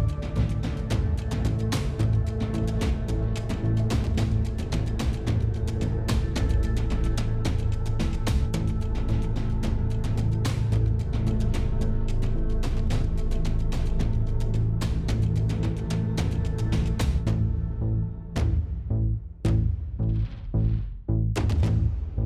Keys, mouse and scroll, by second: 1.3 click, 2.1 BackSpace, 3.1 BackSpace, 4.9 s, 6.8 click, 7.5 click, 7.9 s, 11.0 click, 11.8 click, 12.7-14.8 middle drag, 15.3 s, 19.1 middle click, 19.3 click, 20.7 s, 21.7 s.